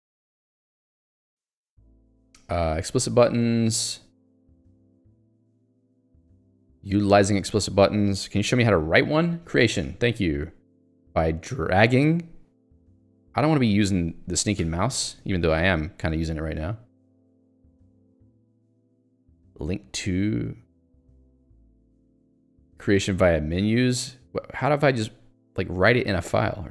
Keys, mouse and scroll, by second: 0.7 click, 0.8 middle click, 3.6 middle click, 4.5 ctrl+d, 8.0 middle click, 16.1-16.7 scroll down 1, 16.7 scroll down 1, 17.9-18.7 scroll up 1, 19.1 scroll up 1, 19.8 scroll down 1, 20.8 scroll up 1, 22.4 click, 23.5 middle click, 24.5 scroll down 1.